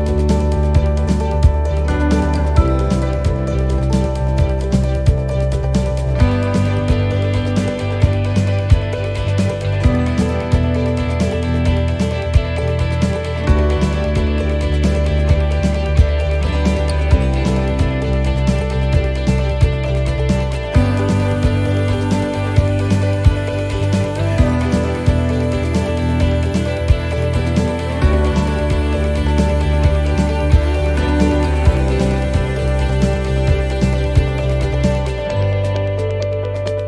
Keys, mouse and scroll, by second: 1.2 middle click, 1.5-2.1 scroll down 3, 2.2 shift+middle click, 2.6 scroll up 4, 3.1 middle click, 3.6 shift+middle click, 4.1 middle click, 5.9 shift+middle click, 6.9 middle click, 7.7 scroll up 1, 9.7 ctrl+r, 11.4 middle click, 12.5 right click, 13.0 middle click, 14.2 shift+right click, 14.6 middle click, 15.2 shift+right click, 15.7 shift+right click, 16.1 middle click, 16.9 click, 19.6 middle click, 20.0-20.3 scroll down 2, 20.6 shift+middle click, 21.5 middle click, 22.3 middle click, 22.8 scroll up 2, 24.0 ctrl+r, 25.1 right click, 26.1 click, 27.3 ctrl+r, 28.2 right click, 29.2 click, 30.0 middle click, 30.4 scroll down 1, 30.8 shift+middle click, 32.4 middle click, 33.1 scroll up 2, 33.7 right click, 35.4 click, 36.4 right click.